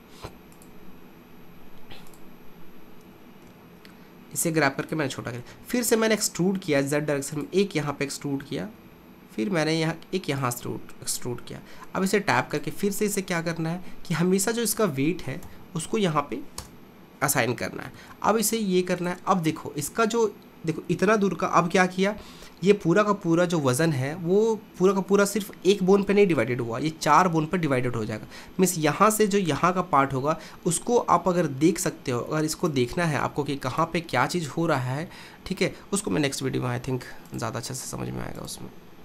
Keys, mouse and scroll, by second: 2.1 click, 3.1 g, 5.5 e, 7.9 e, 11.5 Tab, 12.6 click, 14.1 shift+click, 15.5 ctrl+p, 18.0 ctrl+Tab, 18.9 click, 32.7-35.6 drag, 37.3-39.0 drag.